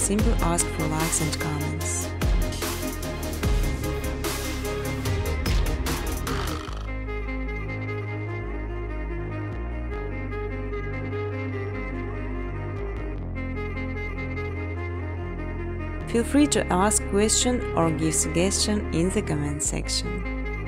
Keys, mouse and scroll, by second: 1.1 click, 1.4-4.1 typing, 1.5 click, 2.0 click, 2.7 click, 6.1 click, 6.1-7.5 typing, 8.7 click, 9.0 click, 10.2 click, 11.3-13.1 typing, 14.5-15.2 typing, 15.5 Tab, 16.8-17.5 typing, 18.6-19.3 typing, 20.3 Tab, 20.5-20.6 Tab.